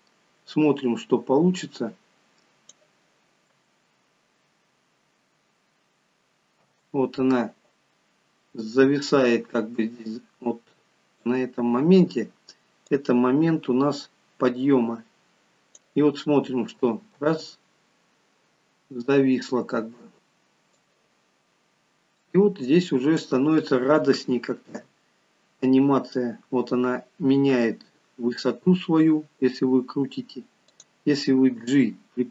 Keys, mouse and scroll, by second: 1.7 click, 3.6 space, 6.6 space, 8.8 click, 12.9 click, 16.5 space, 17.1 space, 20.7 click, 24.7 r, 31.6 g.